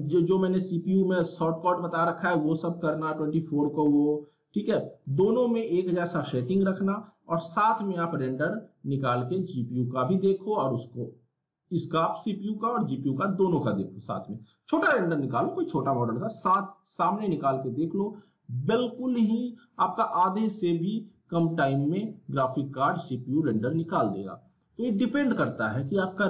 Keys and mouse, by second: 0.1 click, 8.3 click, 13.5 click.